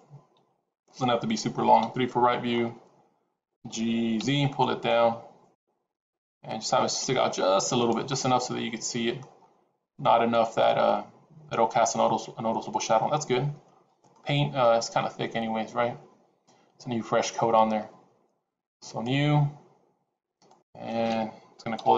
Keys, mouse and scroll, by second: 0.2 g, 1.6 KP_3, 2.4-2.8 scroll up 6, 3.5 g, 8.0 middle click, 9.3 scroll up 3, 9.9 middle click, 13.8 scroll down 3, 14.0 middle click, 18.8 click, 20.4 click.